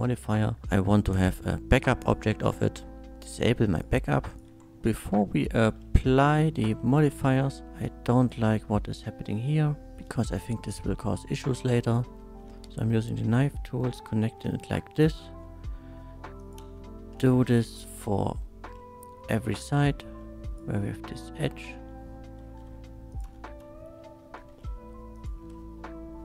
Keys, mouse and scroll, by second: 1.1 click, 2.0 click, 3.7 shift+click, 4.3 shift+click, 4.5 Tab, 4.8 click, 5.4 shift+middle click, 6.2 2, 6.7 shift+2, 6.8 shift+middle drag, 7.6 ctrl+z, 8.2 click, 8.2 1, 9.6 middle click, 9.9 x, 11.8 click, 12.4 space, 12.9 space, 13.5 shift+middle click, 14.2 k, 15.0 click, 15.3 x, 16.4 click, 16.6 space, 17.2 shift+space, 17.3 shift+middle click, 18.4 shift+middle click, 19.4 k, 20.4 click, 22.4 x, 23.1 click, 23.2 space, 24.4 k, 25.1 click, 25.4 x.